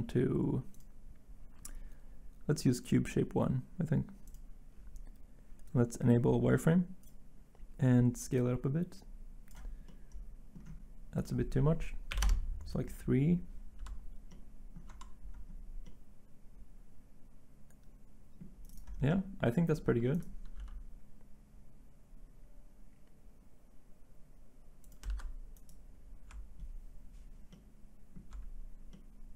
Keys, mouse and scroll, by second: 12.1 3, 12.2 Return, 20.5 g, 25.0 ctrl+z.